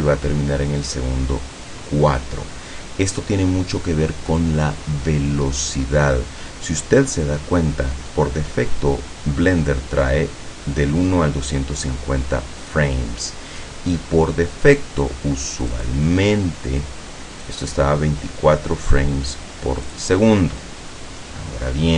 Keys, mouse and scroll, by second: 15.8 click, 17.6 click, 20.0 click.